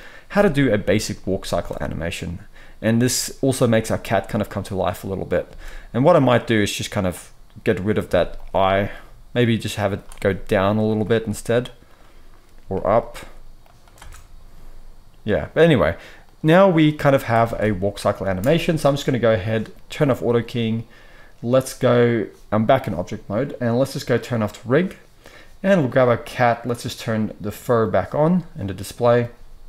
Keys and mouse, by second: 1.4 space, 5.4 space, 6.5-10.9 drag, 8.0 x, 10.9-13.6 middle drag, 11.2 g, 12.6 g, 13.6-20.3 drag, 13.9 space, 17.4 alt+a, 18.2 space, 20.3 middle click, 24.3 click, 25.7-26.8 drag, 29.6 ctrl+s.